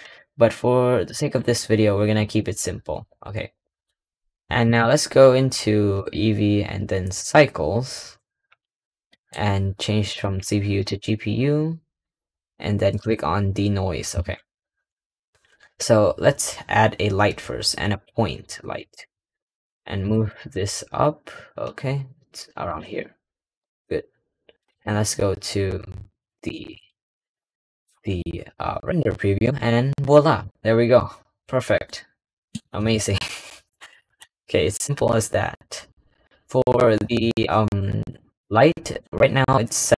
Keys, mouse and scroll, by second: 1.1 click, 1.2-3.9 scroll down 4, 7.2-8.7 drag, 8.7 scroll down 2, 9.0-10.8 middle drag, 10.8-12.9 drag, 18.3-18.7 scroll up 3, 18.7 g, 20.2 middle click, 20.5-21.2 scroll up 4, 21.2 g, 22.8-24.7 scroll down 6, 24.7 click, 26.4-29.9 middle drag, 30.8 scroll down 1, 31.8-34.0 middle drag, 34.0 KP_0, 34.8-35.9 scroll up 2, 39.1 click.